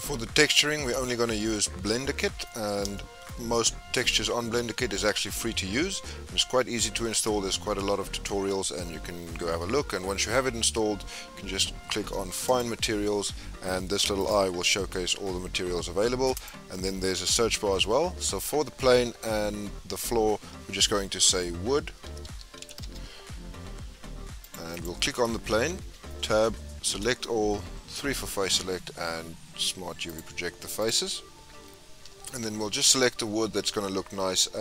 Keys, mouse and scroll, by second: 0.0-0.8 middle drag, 0.8-1.2 scroll up 2, 1.2 scroll down 2, 1.4-3.4 middle drag, 3.4-3.9 scroll up 3, 3.9 scroll down 2, 4.2-12.5 middle drag, 12.5 click, 14.3-15.4 drag, 15.5-19.6 drag, 22.4 o, 24.4 click, 24.7 click, 25.7 Tab, 26.9 a, 27.7 3, 28.3-31.3 right drag, 32.0 Tab.